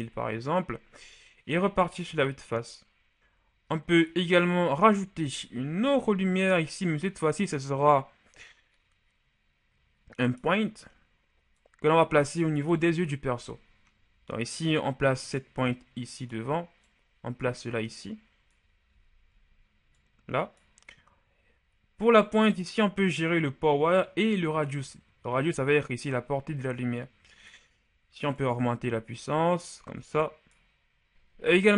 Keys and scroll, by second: 0.0 Return, 2.0 KP_1, 5.6 shift+a, 12.6 KP_1, 31.1 KP_7.